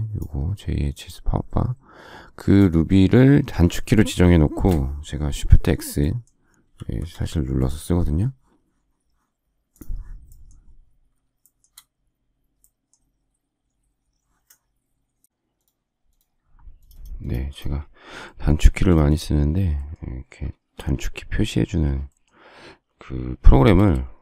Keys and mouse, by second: 20.6 shift+x, 23.7 space.